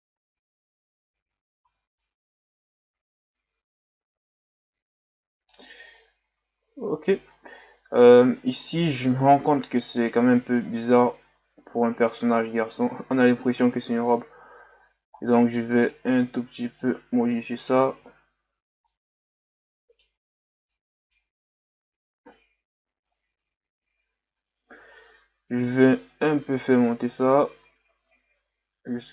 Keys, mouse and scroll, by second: 0.5-1.1 scroll down 4, 1.1 Tab, 1.6 a, 2.0-5.0 middle drag, 6.8 KP_3, 7.6-8.0 scroll up 4, 8.0 Tab, 9.4 s, 12.4 scroll down 1, 12.7-14.0 middle drag, 14.0 KP_1, 15.1-15.9 scroll up 3, 15.9-17.3 drag, 17.3 KP_3, 18.1-18.8 shift+scroll up 5, 18.8 scroll up 1, 18.9-20.3 middle drag, 20.3-20.7 scroll down 4, 20.7-21.5 middle drag, 21.5 Tab, 22.2 KP_1, 24.4-24.7 scroll up 1, 24.7 Tab, 25.6-28.7 drag.